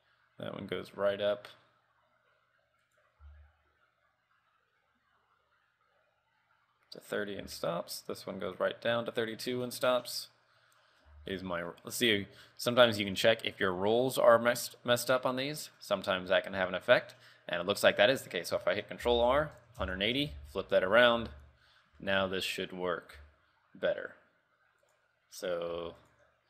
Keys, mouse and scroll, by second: 3.4 r, 7.5 r, 10.3 right click, 10.7-11.0 scroll up 4, 11.3 Tab, 11.5 middle click, 12.9 click, 14.7 click, 15.2 middle click, 16.6 middle click, 17.3 middle click, 19.2 ctrl+r, 20.5 Tab, 21.1 scroll down 3, 21.3 KP_3, 21.8-22.2 scroll up 3, 22.2 shift+middle click, 22.6 scroll down 1, 23.5 r, 25.5-26.0 scroll down 3, 26.0 r.